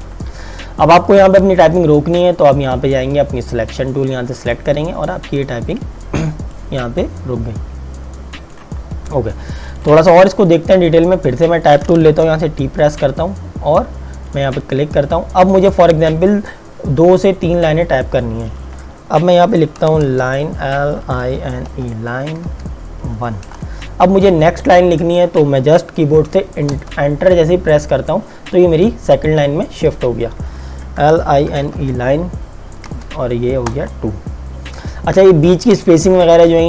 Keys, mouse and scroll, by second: 4.5 click, 12.3 t, 14.4 click, 20.1-23.1 typing, 26.8 Return, 30.8-33.8 typing.